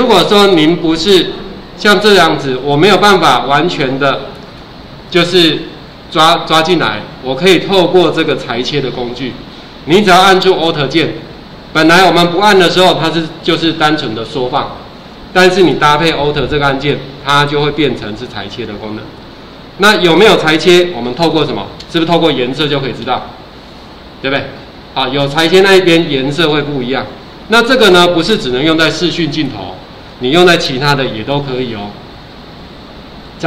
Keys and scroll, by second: 21.1 ctrl+alt+4, 31.0 ctrl+alt+4.